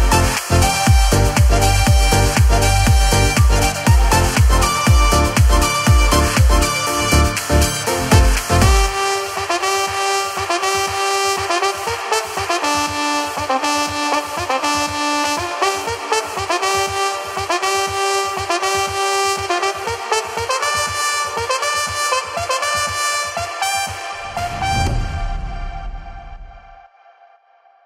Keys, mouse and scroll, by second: 1.0 middle click, 16.3 right click, 19.6 click, 20.6-21.5 scroll.